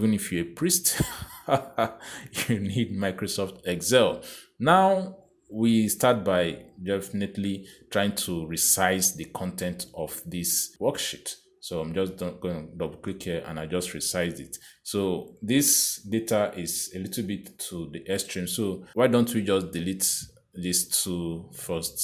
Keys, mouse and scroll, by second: 6.7 click, 10.8 click, 12.7 click, 15.7 click, 16.3 click, 20.4 click.